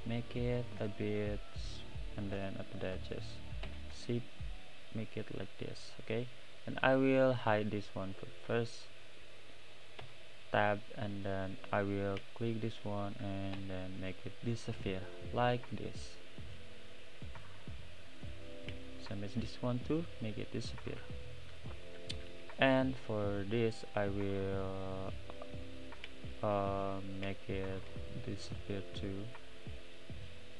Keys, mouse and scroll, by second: 3.7 s, 5.9 click, 7.4 click, 7.9 middle drag, 8.1-8.5 scroll up 2, 8.5 click, 8.9-10.0 middle drag, 10.0 Tab, 11.8 click, 18.3 click, 19.3 x, 20.6-26.0 middle drag, 26.0 click, 26.6-29.3 middle drag, 29.3 shift+click, 30.3 shift+click.